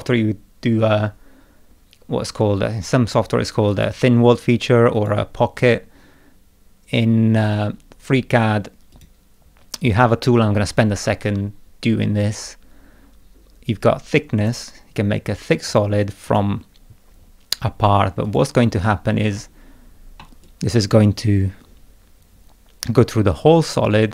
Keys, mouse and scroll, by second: 3.7 click, 4.9 click, 8.9 click, 14.4 click, 15.7 click, 16.2 click, 18.2 click, 20.2-24.1 middle drag, 20.4-24.1 drag.